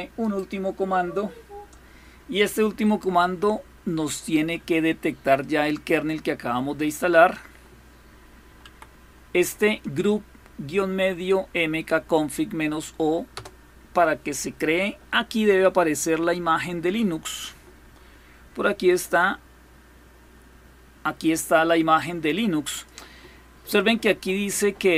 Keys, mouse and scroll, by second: 0.5 click, 5.1 right click, 6.5 click, 8.3 Right, 13.1 Return, 18.7-22.5 drag.